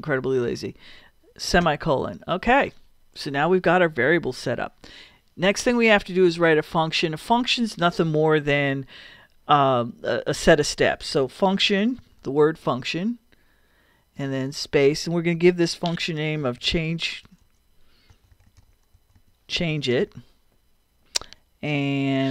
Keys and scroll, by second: 1.6 ;, 2.4 Return, 10.9-12.2 typing, 14.2 space, 16.2-21.0 typing.